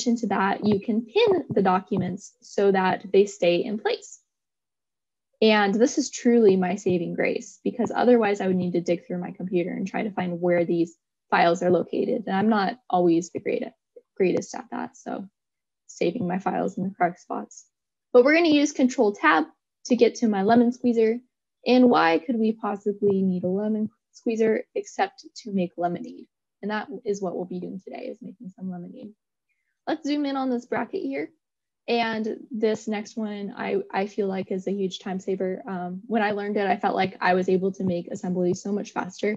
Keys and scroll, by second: 17.0 ctrl+Tab.